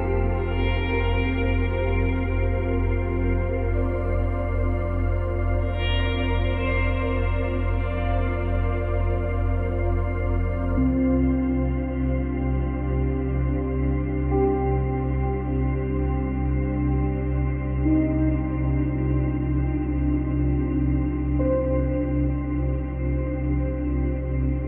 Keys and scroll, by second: 0.4 space, 3.2 space, 17.8 space, 23.0 space.